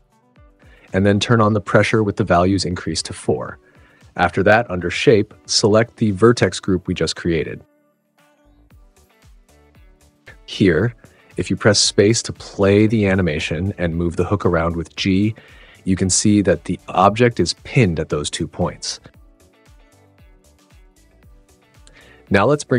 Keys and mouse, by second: 0.8 right drag, 1.8 right click, 3.7 right click, 6.1 right drag, 7.7-8.8 right drag, 10.5 right click, 10.7 click, 12.3 space, 13.4 click, 14.4 g, 21.9 space, 22.5 super+z.